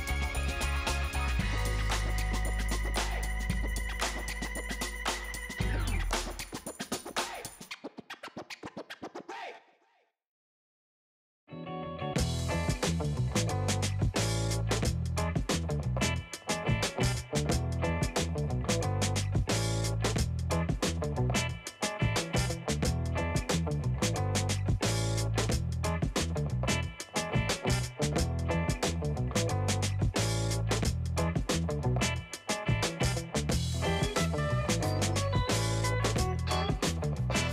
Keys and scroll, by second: 15.4 space, 22.1 space, 27.5 space, 34.1 space.